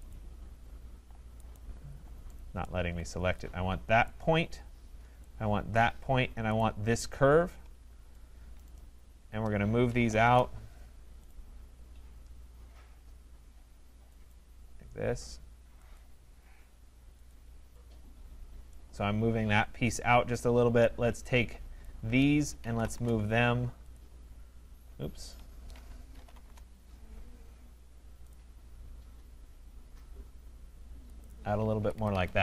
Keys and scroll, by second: 10.2 Return, 22.9 Return, 25.2 Escape, 26.4 Return, 31.8 Escape.